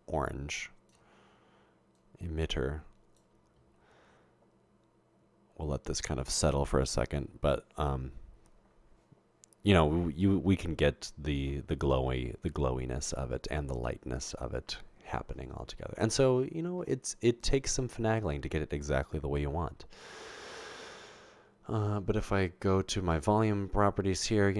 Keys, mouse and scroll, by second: 2.0-3.2 drag, 23.1 click.